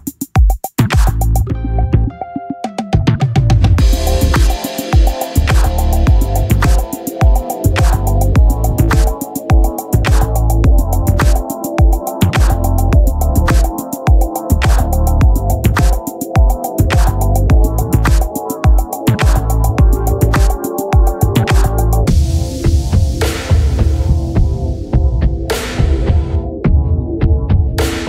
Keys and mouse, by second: 3.8 click, 5.9 click, 8.9 click, 11.8 click, 13.3 click, 16.5 click, 18.3 click, 27.2 click.